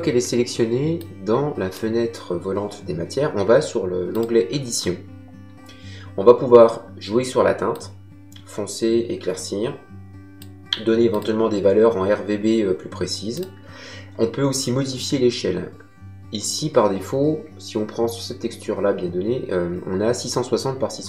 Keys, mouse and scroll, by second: 0.9 click, 4.0 click, 7.6 click, 11.0 click, 13.3 click.